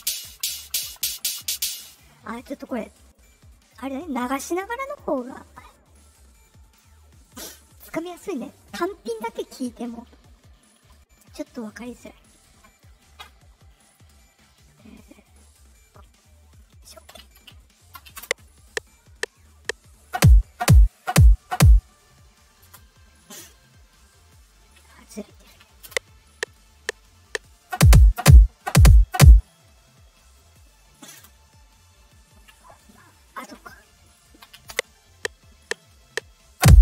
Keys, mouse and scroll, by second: 0.2 Right, 1.2 Right, 3.1 click, 4.8 click, 6.4 click, 7.1 click, 7.8 click, 11.8 click, 13.8 right click, 16.8 right click, 18.1 space, 22.6 space, 24.8 middle click, 24.8 scroll, 25.8 space, 31.1 space, 32.5 middle click, 32.5 scroll down 2, 34.0 click, 34.6 space.